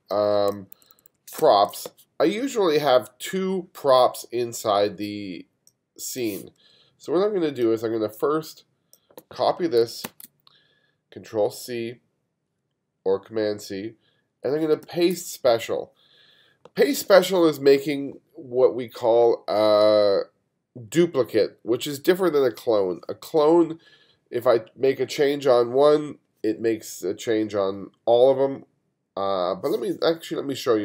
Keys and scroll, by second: 0.7 2, 1.4 space, 10.1 super+c, 14.9 super+b.